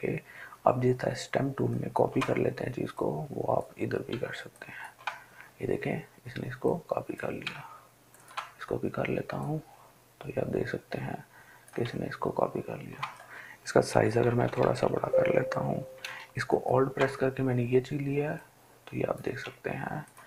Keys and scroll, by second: 14.1-15.0 typing.